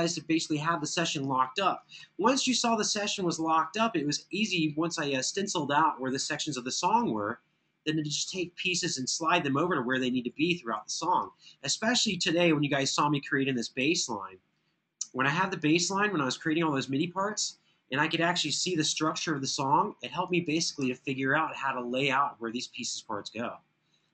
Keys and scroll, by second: 1.8 super+=, 6.3 super+], 6.7 super+], 9.9 super+[, 10.2 super+[, 18.6 super+], 18.9 super+].